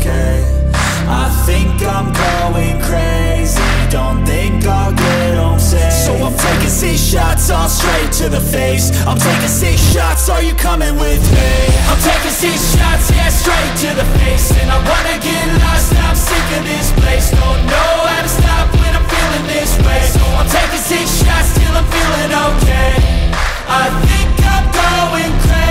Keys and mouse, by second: 0.3 drag, 2.3 g, 4.3 click, 5.4-7.2 drag, 7.6 click, 8.7 click, 9.5 click, 10.4-15.3 drag, 15.8 drag, 17.0 click, 19.7 g, 23.0 click, 24.3 r.